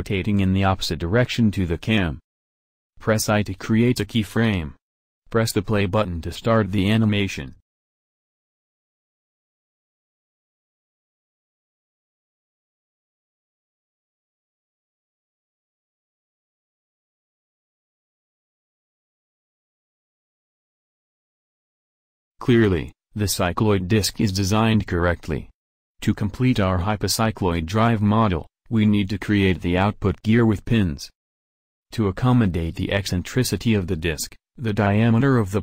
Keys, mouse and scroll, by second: 4.1 i, 6.2 right drag, 18.5 click, 19.9 middle click, 20.7 KP_1, 20.8 KP_7, 21.5 z, 28.5-29.7 middle drag, 28.9 z, 30.0 click, 34.5 shift+a.